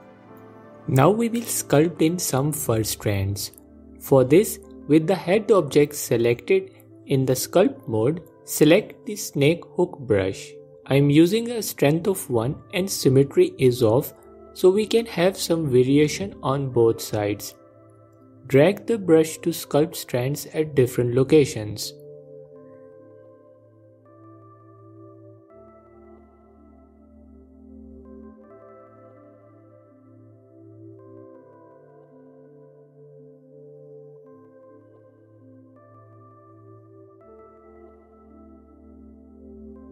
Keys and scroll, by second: 7.2 ctrl+Tab, 12.0 f, 17.5 f, 24.9 f, 29.1 f, 35.5 f.